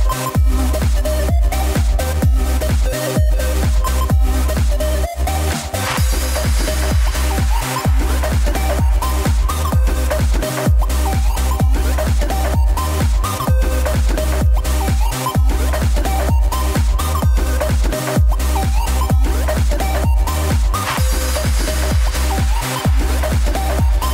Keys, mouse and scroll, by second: 7.1 r, 12.6 i, 13.9-15.6 drag, 15.6 r, 19.7 i, 20.7-24.1 drag.